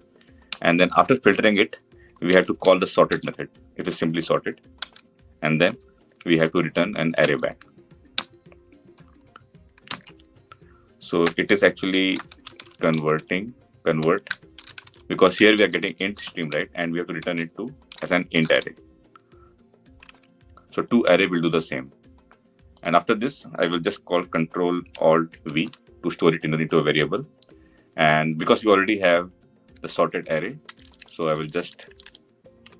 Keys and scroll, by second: 2.9 Return, 9.6 ctrl+alt+l, 25.3 ctrl+alt+v.